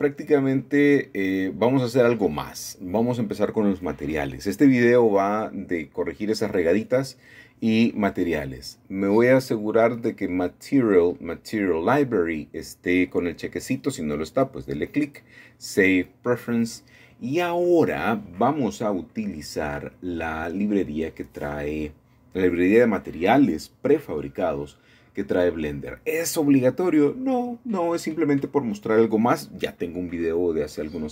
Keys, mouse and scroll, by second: 0.0-1.1 drag, 1.7-2.9 drag, 4.6-7.2 drag, 7.4 typing, 9.8-11.0 drag, 13.2 click, 13.8-14.8 drag, 15.1-18.1 drag, 20.0-21.1 drag, 22.4-23.5 drag, 25.6 scroll down 1, 25.8-26.3 scroll up 1, 26.3-27.7 scroll down 9, 28.8-29.7 drag, 29.5-31.1 scroll down 1.